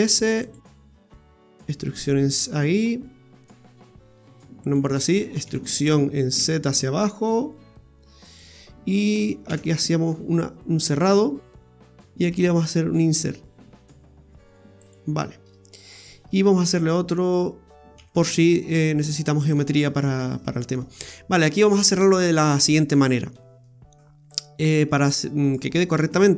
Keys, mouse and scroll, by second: 0.9 e, 5.4 e, 9.6 f, 15.1 scroll down 2, 15.5 middle click, 15.9 scroll up 3, 19.8-20.1 scroll up 4, 20.8 middle click, 24.3 click, 25.4 right click.